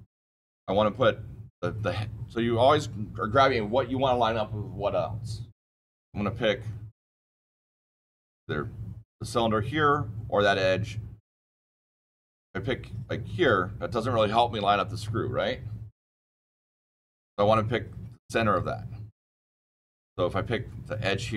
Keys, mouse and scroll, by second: 6.5 middle click, 6.6-7.6 scroll down 8, 7.6-10.2 scroll down 1, 10.2-10.6 scroll down 1, 16.7 middle click.